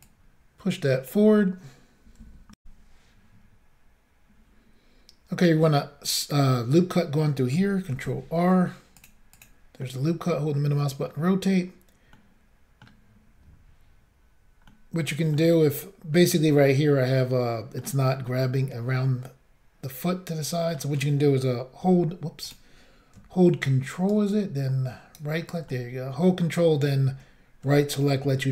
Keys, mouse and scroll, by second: 0.0 click, 2.6 Insert, 7.9 ctrl+r, 9.0 click, 9.3 click, 9.4 double click, 9.8 middle click, 12.1 middle click, 14.7 middle click, 16.1-16.5 scroll down 1, 16.5 middle click, 18.3 middle click, 22.5 click, 24.1 ctrl+right click, 25.7 middle click, 27.8 middle click.